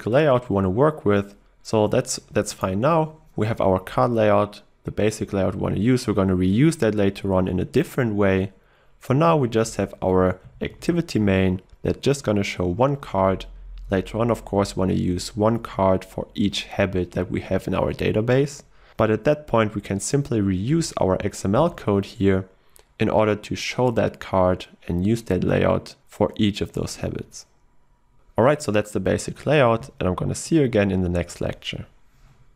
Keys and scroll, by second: 10.8 ctrl+w, 20.7 ctrl+e, 20.9 ctrl+e.